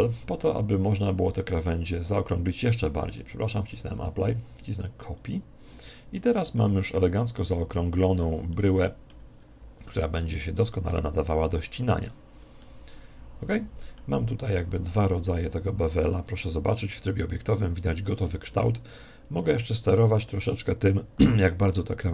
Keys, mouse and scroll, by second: 1.2 click, 3.2 ctrl+z, 5.0 click, 6.5-8.2 middle drag, 8.4-14.3 middle drag, 10.2 Tab, 14.5 Tab, 15.4 z, 16.0-17.6 middle drag, 19.2 click.